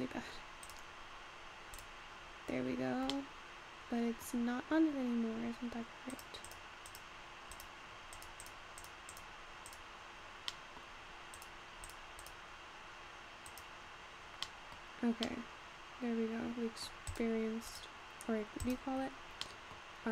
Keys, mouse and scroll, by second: 0.8 click, 1.8 click, 2.3-2.8 scroll up 4, 2.8-3.4 scroll down 1, 3.4 middle click, 4.3-5.3 scroll up 4, 5.3-6.4 scroll down 1, 6.4 click, 7.0 click, 7.5 click, 8.7 click, 9.2-10.2 drag, 10.2-11.2 scroll down 2, 11.2-11.6 scroll up 1, 11.6 click, 12.6 click, 14.0 click, 14.5-17.2 middle drag, 17.2 click, 17.7 click.